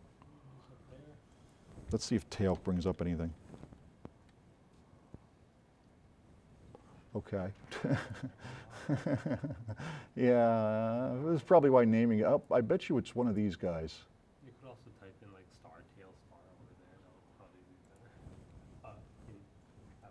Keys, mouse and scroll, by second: 2.6-4.5 typing, 9.7 click.